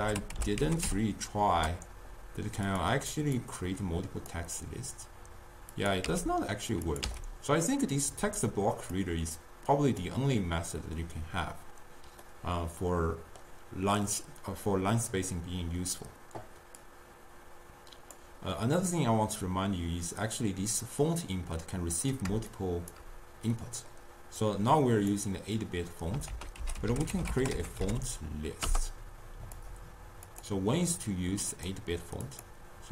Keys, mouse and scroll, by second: 3.4-5.9 drag, 6.6 x, 6.9 click, 7.4 x, 8.0 drag, 9.4-12.4 drag, 12.4-15.5 middle drag, 16.9 click, 22.5 shift+right click, 23.6-24.6 middle drag, 24.6 click, 26.4 ctrl+a, 30.5-32.9 drag.